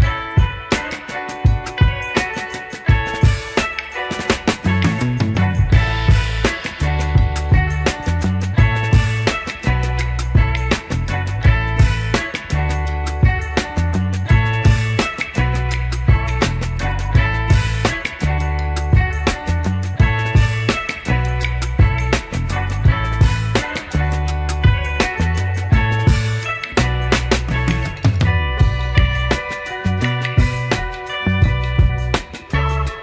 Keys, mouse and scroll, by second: 0.0 scroll down 4, 1.2 s, 4.8-7.0 middle drag, 8.2 KP_3, 8.6 KP_3, 8.8 KP_1, 10.6 scroll down 1, 10.9-11.2 shift+middle drag, 13.4 click, 14.0 click, 15.4-17.5 drag, 18.2 shift+click, 20.0-21.7 drag, 22.2 click, 22.9 click, 23.7 click, 24.9-27.6 drag, 28.4 click, 29.2 click, 30.3-30.8 scroll up 3, 30.8 shift+middle click, 31.5-31.8 scroll up 2, 32.6 s.